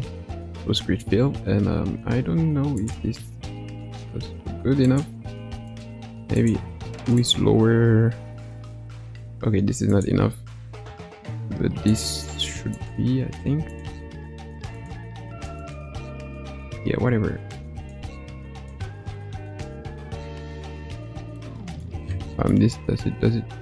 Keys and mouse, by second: 4.8 click, 5.7 click, 6.3 click, 9.8 click, 11.8 click, 12.7 click, 13.7 click, 14.7 click, 15.5 click, 17.7 click, 18.5 click, 21.3 middle click, 22.7-23.6 middle drag.